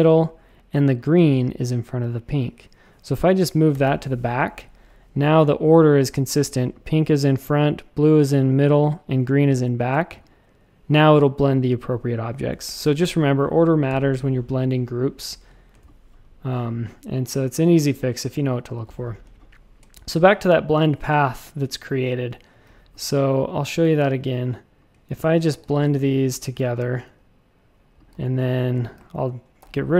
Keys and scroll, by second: 3.7 super+[, 3.8 super+[, 15.7 space, 19.2 space, 19.7 space, 22.5 a, 25.5 alt+super+b, 25.9 a, 28.1 v, 29.6 alt+shift+super+b.